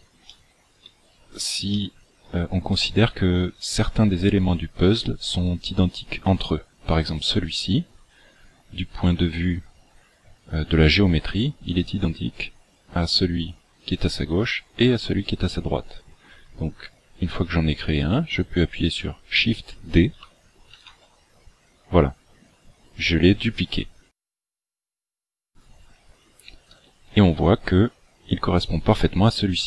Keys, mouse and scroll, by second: 0.3 shift+middle click, 1.1-1.7 scroll up 2, 1.7 shift+middle click, 1.7 scroll up 1, 20.7 shift+d.